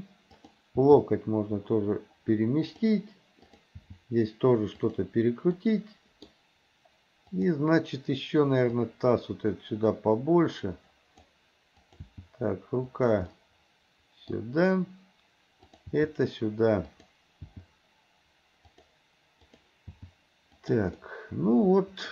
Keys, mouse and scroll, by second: 0.4 click, 0.9 g, 3.5 click, 3.8 g, 5.6 middle click, 7.3 click, 8.9-11.3 drag, 11.8 click, 12.2 g, 13.3-15.1 middle drag, 15.7 click, 16.0 g, 17.5 g, 19.5 click, 20.0 g, 21.0-22.1 middle drag.